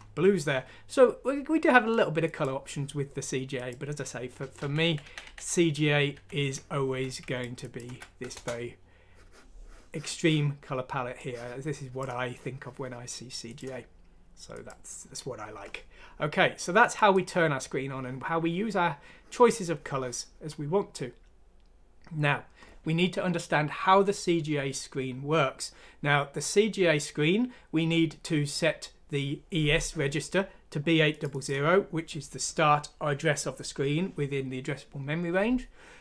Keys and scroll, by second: 4.5 ctrl+z, 4.8 ctrl+z, 5.0 ctrl+z, 5.2 ctrl+z, 6.1 ctrl+z, 7.8 F6, 8.3 Return.